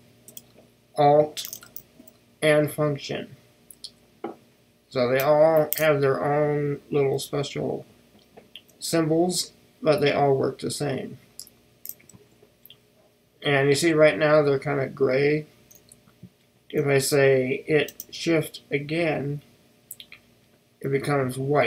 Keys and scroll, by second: 2.0 ctrl+alt+shift+super+f.